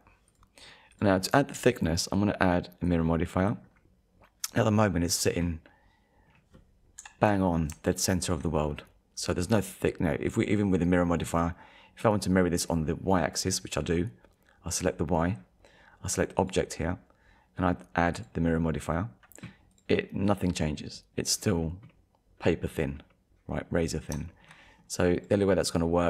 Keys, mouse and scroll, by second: 0.1 ctrl+s, 0.1 middle click, 0.3 click, 0.5 middle click, 0.9 click, 1.3 middle click, 2.9 click, 3.4 scroll down 1, 3.6 middle click, 5.7 middle click, 7.0 KP_7, 8.0 shift+middle click, 8.7 scroll up 1, 9.1 scroll down 1, 14.8 click, 16.4 click, 18.1 click, 19.7 click, 20.2 middle click, 21.5 scroll down 1, 21.9 middle click, 23.9-24.3 scroll down 2, 24.3 shift+middle click, 24.6 middle click, 25.1 click.